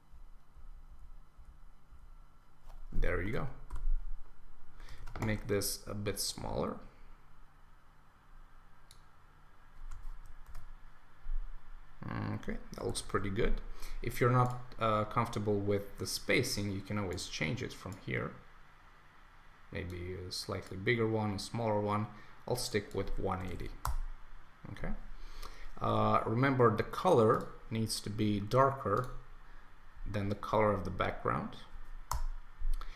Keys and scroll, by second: 3.2 super+Return, 5.0 super+t, 10.4 Return, 12.9 Return, 23.8 Return, 32.1 Return.